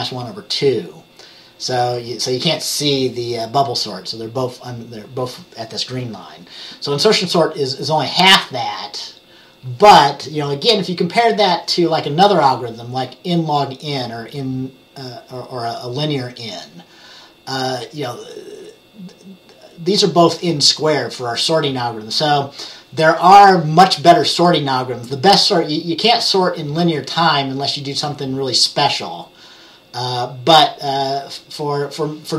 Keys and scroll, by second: 11.5 Page_Down.